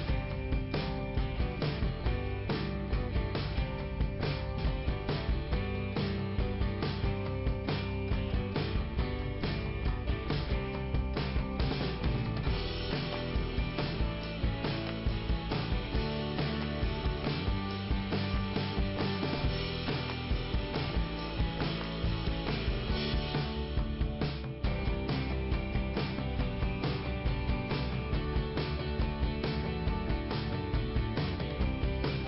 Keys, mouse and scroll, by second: 0.8 middle click, 1.5-2.1 scroll up 1, 2.6 scroll down 2, 3.3 scroll up 1, 3.8 click, 5.4 click, 7.0 click, 7.0 click, 8.3 click, 9.2 click, 12.5 click, 12.6 click, 13.0 scroll down 2, 14.3 ,, 14.9 scroll up 2, 15.6 right click, 16.5 click, 17.6 click, 18.2 click, 19.7 click, 20.1 click, 20.2 double click, 20.9 double click, 22.2 right click, 22.5 right click, 23.0 click, 24.0 click, 24.7 click, 26.2 click, 27.8 click, 28.1 click, 29.7-30.9 scroll down 1, 31.1 click, 31.6 click.